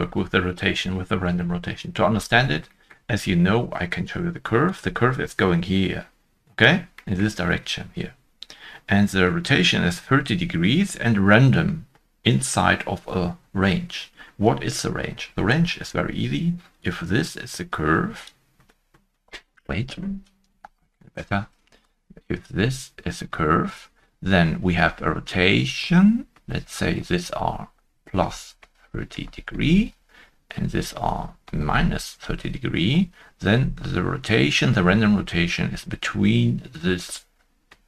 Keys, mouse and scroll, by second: 2.0 scroll down 1, 2.8 scroll down 1, 2.8 shift+middle click, 6.9 shift+middle click, 6.9 scroll down 1, 6.9 shift+middle click, 15.7 ctrl+s, 15.8 scroll down 1.